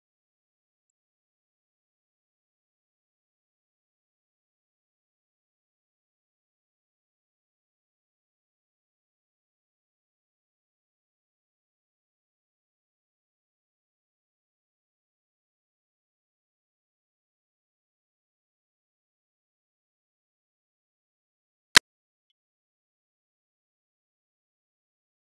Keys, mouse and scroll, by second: 0.3 0, 0.8 click, 1.5 click, 1.8 middle click, 2.1-3.3 drag, 3.3 middle click, 3.5 0, 3.6-4.5 middle drag, 4.5 shift+d, 4.7 middle click, 4.9 shift+d, 5.2-6.8 drag, 6.8 middle click, 7.0 KP_Decimal, 7.2 middle click, 7.4-8.5 scroll up 13, 7.7 KP_Divide, 8.0 middle click, 8.5 middle click, 8.7-10.5 ctrl+shift+drag, 10.5 scroll down 3, 10.7 click, 10.9 middle click, 11.1 click, 13.3 click, 13.4 shift+a, 14.5 click, 14.7 shift+a, 15.7-17.3 drag, 17.3 middle click, 17.7 shift+d, 17.9-21.2 drag, 21.3 ctrl+b, 21.5 z, 22.1 u, 22.5 alt+h, 23.3-24.3 scroll up 6, 24.4 middle click, 25.3 click.